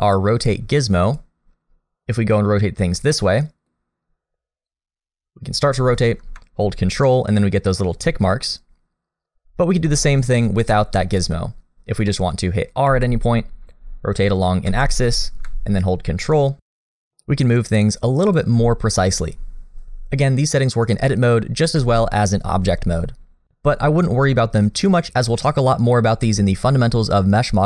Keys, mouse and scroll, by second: 1.0 click, 2.5-3.1 scroll up 2, 3.1 middle click, 4.7 click, 11.0 click, 11.9 scroll down 1, 12.1 middle click, 12.9 r, 23.2 Tab.